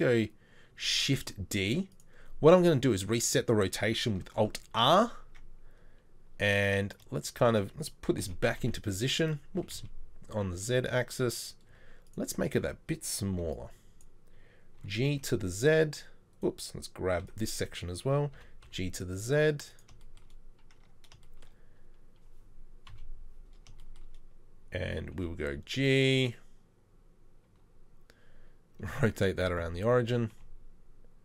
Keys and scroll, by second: 0.8 shift+d, 4.4 alt+r, 5.3 Tab, 8.3 Tab, 8.3 g, 11.7 z, 13.4 z, 13.5 b, 14.8 b, 14.8 g, 17.3 g, 17.3 b, 18.4 g, 20.8 Tab, 22.9 KP_3, 25.2 g, 27.5 r, 30.3 r, 30.4 g.